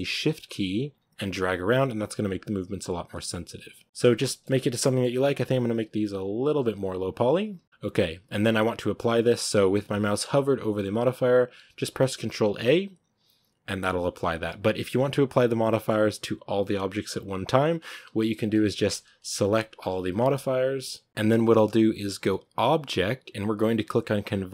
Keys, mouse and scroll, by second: 4.0 scroll down 3, 4.2-4.5 middle drag, 4.5 right drag, 4.7 shift+middle drag, 4.9 scroll up 3, 5.6-7.0 shift+drag, 7.0 right click, 7.6-13.1 shift+drag, 13.1-14.2 scroll down 1, 14.2-17.0 middle drag, 17.0-18.4 scroll down 1, 18.4-21.1 right drag, 21.1 ctrl+z.